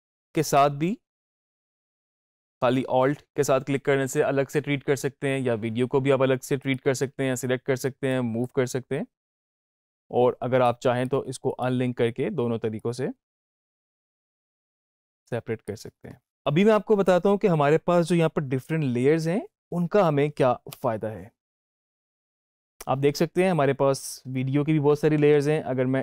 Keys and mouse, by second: 0.3 click, 6.1 alt+click, 6.5-9.7 alt+drag, 9.7 ctrl+z, 10.5 click, 11.4 right click, 12.7-22.3 drag.